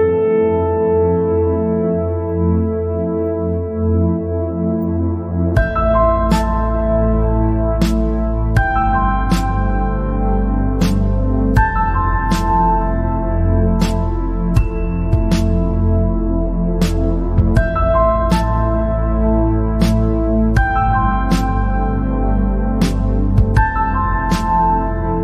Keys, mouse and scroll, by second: 2.2 scroll up 4, 2.8 click, 3.2-3.8 scroll down 5, 4.1-4.6 scroll down 3, 4.6-5.1 scroll up 1, 6.9-7.3 scroll down 2, 7.3 scroll up 2, 8.1 KP_0, 9.8 click, 10.8 click, 11.6 space, 12.4 space, 13.3 KP_0, 14.3-14.6 scroll down 3, 14.7-15.2 scroll up 3, 15.3 scroll down 1, 16.2 space, 17.2 space, 20.4 click, 21.6 click, 22.6-22.9 scroll up 3, 23.1 click, 23.6-23.9 scroll up 2.